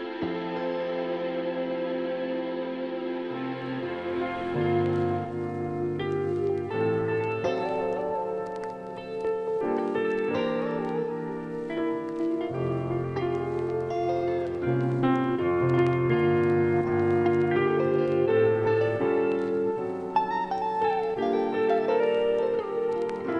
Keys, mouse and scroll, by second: 1.9-3.3 drag, 5.0 z, 5.4-9.2 drag, 9.2 click.